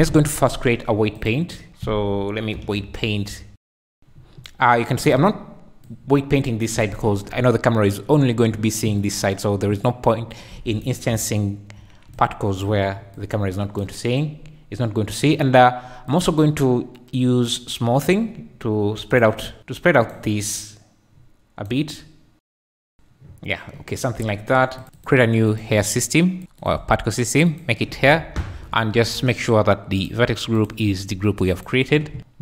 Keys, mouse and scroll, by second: 1.2-1.7 drag, 2.7-3.5 typing, 5.9 click, 6.9 ctrl+z, 11.1 ], 11.6 ], 12.1 click, 12.1 ], 13.1 click, 16.1-17.6 drag, 19.6 click, 20.5-22.3 drag, 22.4 click, 22.7 click, 25.5 click, 26.6 click, 27.5 click, 30.0 click, 30.5-31.7 drag.